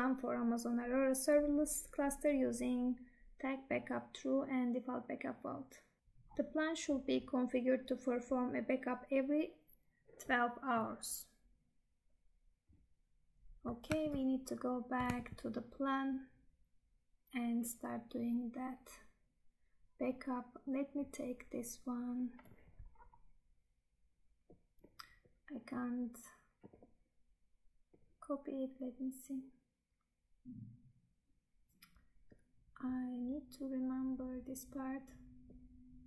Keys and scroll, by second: 14.0 Tab, 15.3 Tab.